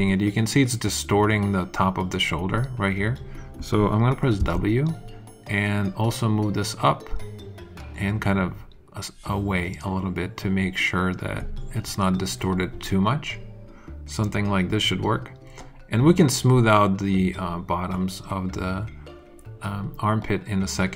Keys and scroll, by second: 4.3 w.